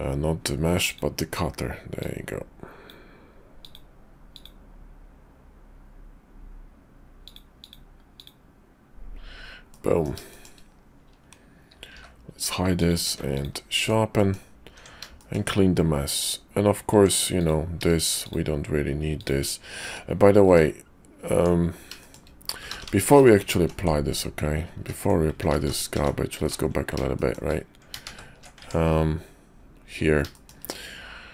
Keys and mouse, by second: 0.9 click, 1.9 click, 9.7 middle click, 10.3 shift+middle click, 11.9 h, 12.7 click, 13.0 q, 14.2 middle click, 14.7 Tab, 15.2 shift+middle click, 16.9 Tab, 17.3 click, 18.1 shift+click, 19.0 shift+click, 19.8 `, 20.3 `, 21.3 Tab, 22.7-23.0 ctrl+z, 23.3 ctrl+z, 23.8 ctrl+z, 24.8 ctrl+z, 25.4 ctrl+z, 25.6 ctrl+z, 25.9 ctrl+z, 26.4 ctrl+z, 27.1 shift+click, 28.0 ctrl+shift+Tab, 30.3 shift+click, 31.0 Tab.